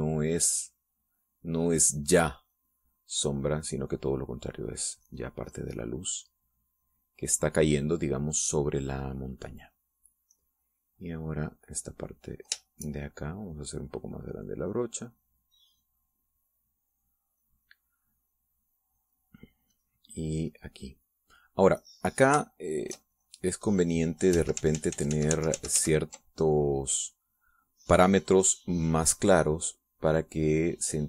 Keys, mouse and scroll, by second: 1.1-5.2 drag, 5.9-7.7 drag, 7.8-9.0 drag, 9.6 middle click, 11.0 click, 12.2-18.7 drag, 18.9 middle click, 19.4-19.9 scroll up 2, 19.5 middle click, 19.9 middle click, 20.8-23.4 scroll up 1, 23.4 shift+scroll up 1, 23.5-25.4 shift+drag, 25.6 ctrl+shift+z, 29.7-31.0 drag.